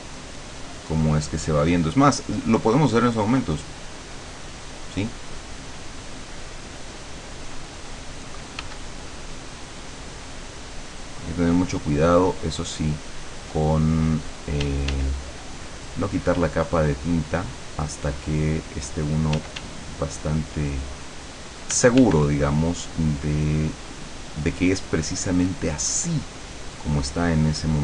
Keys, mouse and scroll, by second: 3.2 click, 6.2 click, 8.6 f, 9.2-15.4 drag, 14.7 d, 15.6-19.5 drag, 19.4 d, 19.8 click, 20.2 click, 21.2 click, 21.8 f, 22.2-27.8 drag.